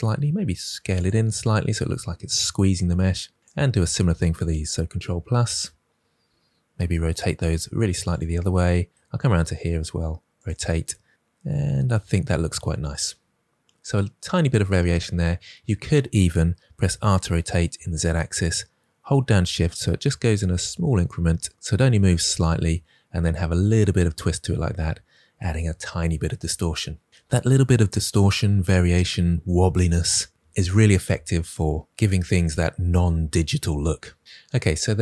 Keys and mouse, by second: 0.2 s, 0.9 click, 5.4 KP_Add, 7.5 r, 8.1 click, 9.2 r, 10.3 click, 16.7 r, 17.6 z, 22.2 click.